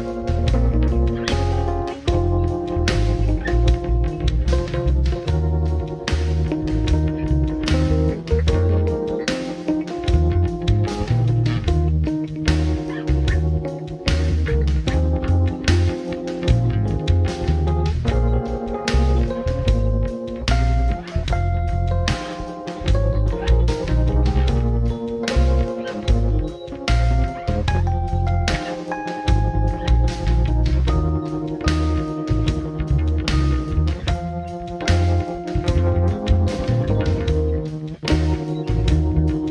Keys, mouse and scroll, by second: 0.1-3.5 drag, 7.2-11.0 drag, 11.0-15.3 middle drag, 16.7 middle click, 18.7 click, 20.6-22.9 drag, 30.9-34.8 middle drag, 39.3 click.